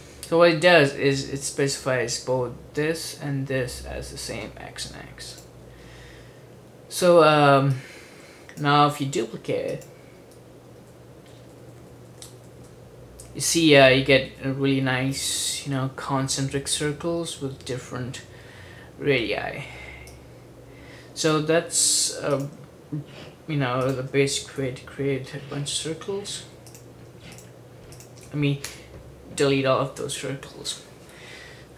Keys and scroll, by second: 10.9 super+d, 11.4 super+d, 11.6 super+d, 11.8 super+d, 11.9 super+d, 12.2 super+d, 12.4 super+d, 12.5 super+d, 12.9 super+d, 14.4 super+d, 24.7 BackSpace, 28.8 BackSpace.